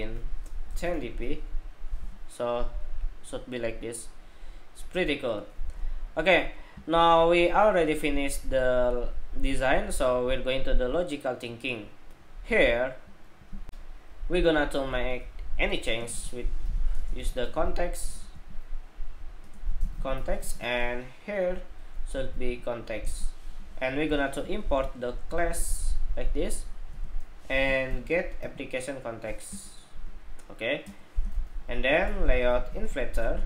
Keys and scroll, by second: 13.4 shift+super+2, 24.5 alt+Return, 25.0 alt+Return.